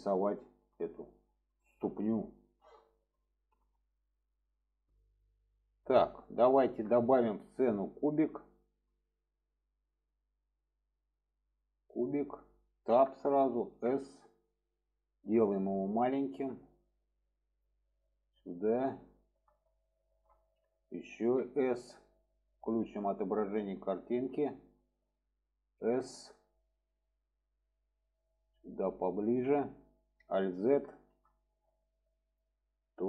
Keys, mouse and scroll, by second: 0.4 shift+middle click, 1.5 shift+middle click, 2.5 shift+middle click, 3.2 shift+middle click, 6.2-7.2 shift+middle drag, 8.0-8.7 shift+middle drag, 9.9-11.7 drag, 12.8 Tab, 13.6 s, 17.0-17.6 drag, 18.0-18.3 shift+middle drag, 19.1 shift+middle click, 19.8 shift+middle drag, 23.3 click, 23.9 middle drag, 27.4-28.7 drag, 28.9-29.2 shift+middle drag, 30.4 alt+z, 30.9 middle click, 32.2 click.